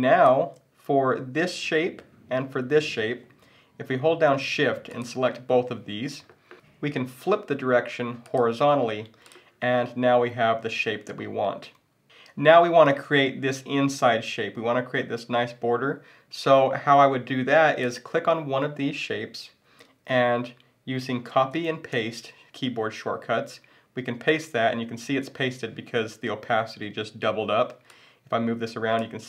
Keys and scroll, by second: 21.3 super+c, 21.9 super+v.